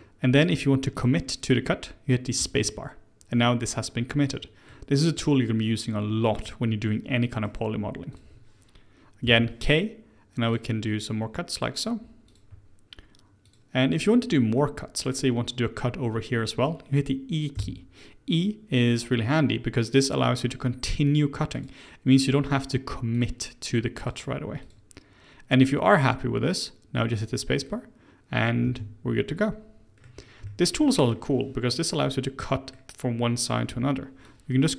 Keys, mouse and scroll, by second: 3.8-8.1 middle drag, 8.1 click, 9.2 k, 14.5-17.6 middle drag, 20.6-23.6 middle drag, 29.2 middle click, 30.0-30.4 scroll down 2, 30.4-33.6 shift+middle drag, 33.6 k.